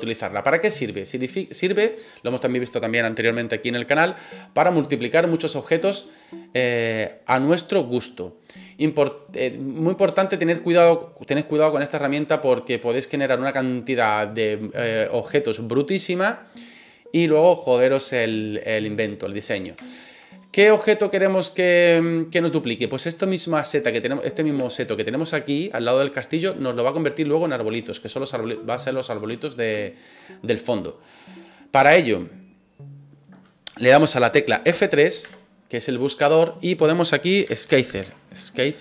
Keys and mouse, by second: 9.5-10.5 middle drag, 12.0 shift+middle click, 13.0 middle click, 19.8 shift+middle click, 20.2-21.9 middle drag, 24.7 shift+middle click, 29.1-29.6 middle drag, 29.8 shift+middle drag, 30.1 middle click, 35.2 F3.